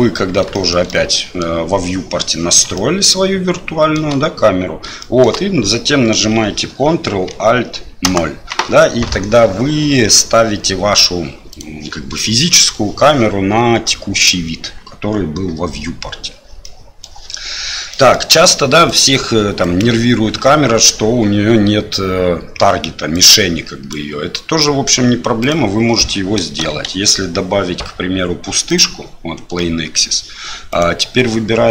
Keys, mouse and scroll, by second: 0.5 shift+middle drag, 0.9 middle click, 2.8-3.9 shift+middle drag, 5.0 shift+middle click, 8.0 ctrl+alt+KP_0, 11.5 right click, 16.6-17.0 middle drag, 17.9 middle drag, 18.9 right click, 19.6 right click, 23.1-23.9 right drag, 24.6-24.9 middle drag, 25.4 right click, 26.8 shift+a, 29.6-30.0 middle drag, 30.7 right click.